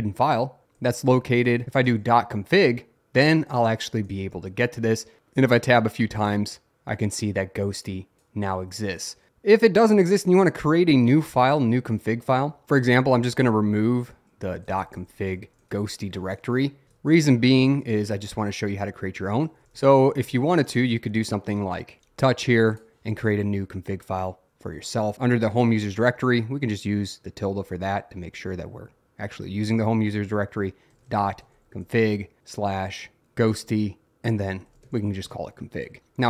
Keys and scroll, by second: 0.9-2.3 typing, 3.5 Tab, 10.3 BackSpace, 14.4-18.1 typing, 16.5 Left, 16.9 Return, 19.2-21.1 typing, 22.0 ctrl+=, 24.5-26.4 typing, 27.5 /, 28.3 ., 30.7-35.4 typing.